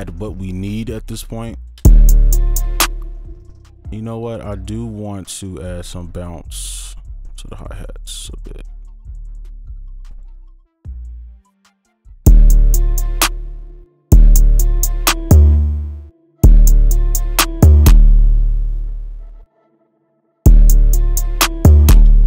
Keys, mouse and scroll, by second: 1.3 right click, 2.8 space, 3.7 ctrl+click, 4.8 ctrl+Delete, 5.5 ctrl+click, 9.7 ctrl+right click, 10.1 ctrl+click, 11.9-12.2 alt+scroll down 3, 12.2 space, 13.2 space, 13.6-14.1 alt+scroll up 2, 14.1-15.1 alt+scroll up 1, 14.1 space, 15.8 ctrl+a, 16.0-16.4 alt+scroll down 3, 16.4 space, 18.5 ctrl+a, 18.7-19.7 alt+scroll up 5, 19.7-20.4 alt+scroll down 1, 20.4-21.9 alt+scroll down 1, 22.0 space, 22.1 right click.